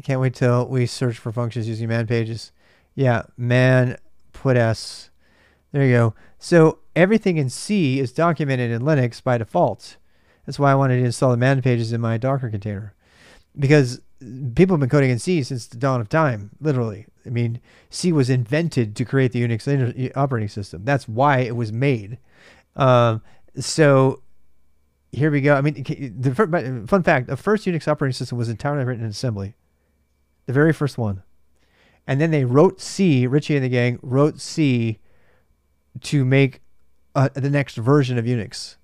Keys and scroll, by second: 0.7-2.8 typing, 4.1-5.0 typing, 22.0-22.4 typing.